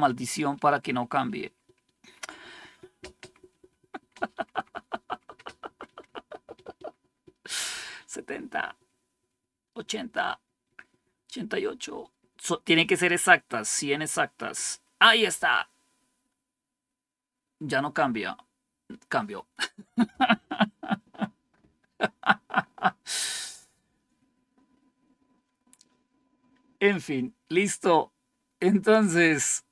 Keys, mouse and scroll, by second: 1.0 F5, 2.1 typing, 2.9 F5, 4.8-6.8 F5, 5.2 typing, 7.1 F5, 9.0-14.2 F5, 9.4 typing, 14.4 F5, 23.4 click.